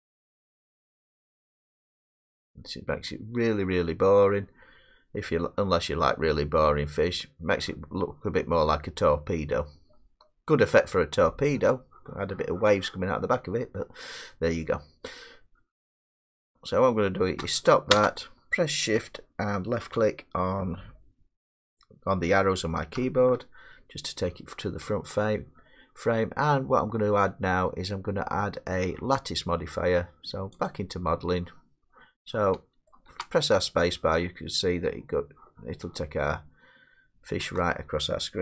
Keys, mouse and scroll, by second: 1.8-2.9 scroll, 3.3 scroll, 8.5 middle click, 17.9 space, 23.0 Left, 30.9 click, 31.7 middle click, 31.8 middle click, 32.3 scroll down 2, 32.9 middle click, 33.1 space, 34.5 middle click, 37.4 space.